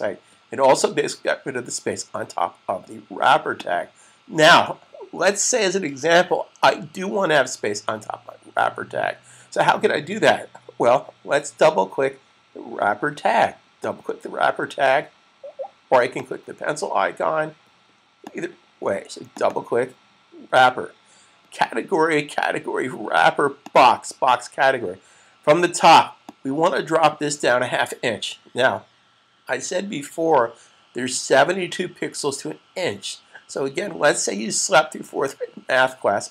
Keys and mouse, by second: 3.5 click, 13.6 click, 13.9 double click, 16.1 click, 19.3 double click, 23.4 click.